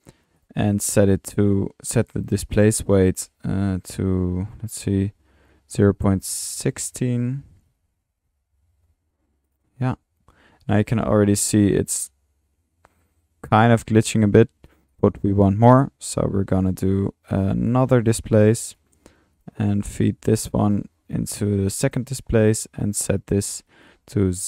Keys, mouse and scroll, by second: 11.3 space, 11.3 middle click, 14.2 middle click, 14.7 click, 15.6-16.6 drag, 17.6 Tab, 17.7-19.1 typing, 17.7-18.1 drag, 18.9 drag, 19.4 click, 20.0-20.8 drag, 22.9 drag, 23.7 click.